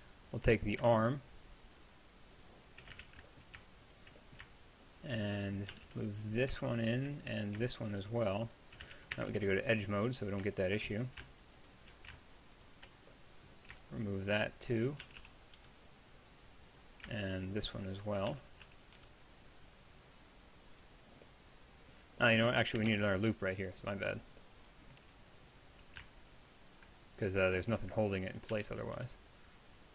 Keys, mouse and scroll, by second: 3.0 ctrl+z, 5.7 g, 8.9 click, 9.0 ctrl+z, 9.2 ctrl+Tab, 15.0 g, 18.3 g, 22.9 ctrl+r, 28.5 g.